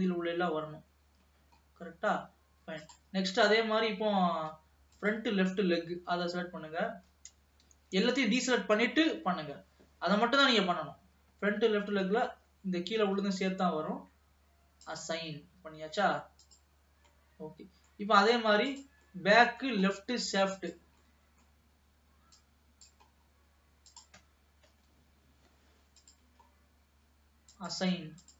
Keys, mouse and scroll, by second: 0.2-1.2 scroll up 2, 1.2-2.4 scroll up 3, 2.4-3.1 scroll down 2, 3.1 click, 3.3-4.3 scroll down 2, 5.1 click, 6.1 l, 7.8 alt+a, 8.6 ctrl+s, 9.3 l, 14.9-17.2 drag, 17.2-18.8 middle drag, 18.8 click, 19.3-20.3 middle drag, 20.3-20.8 scroll up 2, 20.8 click, 21.2-22.5 middle drag, 22.5 click, 23.4-24.2 scroll up 2, 24.2 click, 25.1 l, 26.3 click, 26.6-27.6 scroll down 1, 27.6 click.